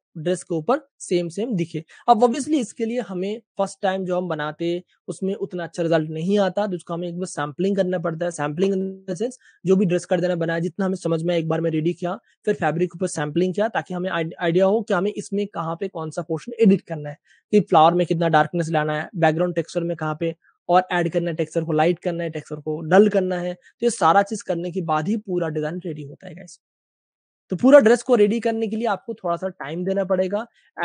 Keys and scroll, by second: 2.8 Page_Up, 28.6 scroll, 29.3 super+space.